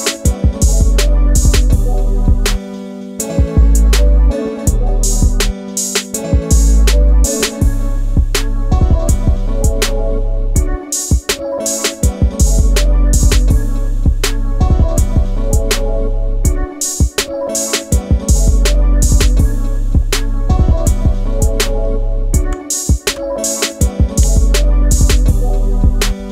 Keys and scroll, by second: 21.6 shift+space, 24.4 Down, 24.8 Down.